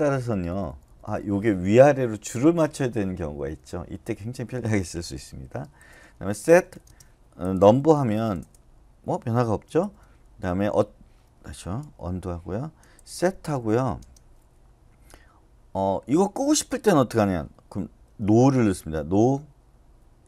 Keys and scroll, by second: 0.1 Left, 0.3 Left, 0.5 Left, 0.6 Left, 0.8 Left, 1.1 Left, 2.4 Right, 2.6 Right, 2.8 Right, 3.0 Right, 3.2 Right, 3.4 Right, 3.6 Right, 5.8-8.2 typing, 9.6-10.3 typing, 11.3 Escape, 11.8-13.4 typing, 17.8-18.6 typing.